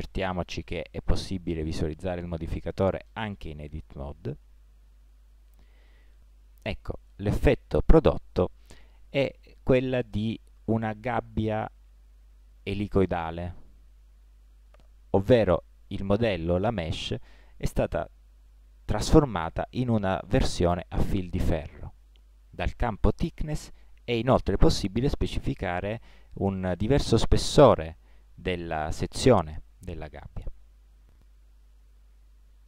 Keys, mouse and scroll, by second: 4.7-6.4 middle drag, 7.0 middle click, 7.2 middle click, 10.5-11.9 middle drag, 12.2 middle click, 15.1-20.0 middle drag, 20.4-22.2 middle drag, 22.8 middle click, 23.7-25.5 drag, 28.0-31.2 middle drag, 31.2 click, 32.1 middle click.